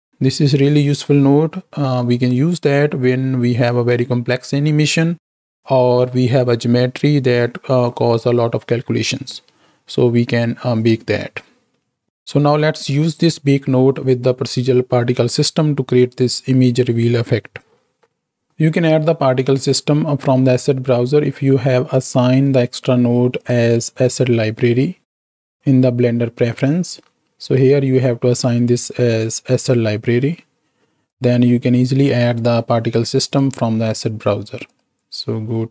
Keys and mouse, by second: 22.6-23.6 drag, 31.9-33.3 drag.